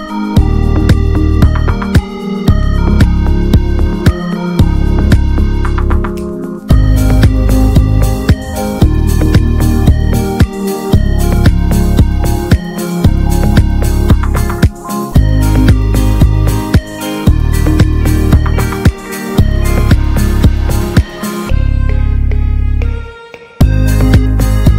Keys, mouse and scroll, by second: 0.5-0.8 middle drag, 1.0-1.3 scroll up 3, 1.3 click, 1.6-1.9 scroll down 1, 1.9-4.6 middle drag, 4.6 F4, 8.6-9.9 middle drag, 9.9-12.5 drag, 15.1-15.5 drag, 15.8-20.5 middle drag, 20.5-21.1 drag, 21.1-21.6 middle drag, 21.6 click, 23.0 F4.